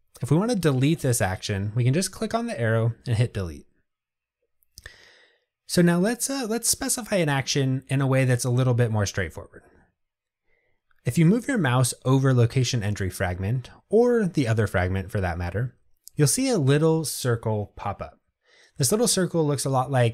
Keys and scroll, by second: 3.2 Delete.